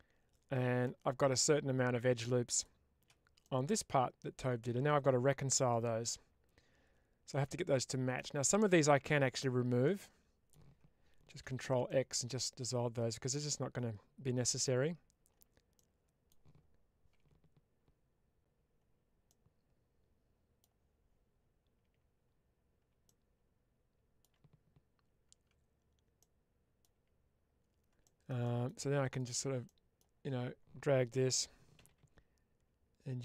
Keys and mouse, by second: 0.7-1.8 middle drag, 2.5 alt+shift+click, 3.3-8.0 middle drag, 9.1 alt+click, 9.7 middle click, 11.3 ctrl+x, 11.7-14.5 middle drag, 15.6 middle click, 19.1-20.5 middle drag, 21.8 Tab, 22.9-24.1 shift+middle drag, 26.2 middle click, 26.8 Tab, 27.9 shift+middle click, 28.3 middle click, 29.5 middle click, 31.6 g.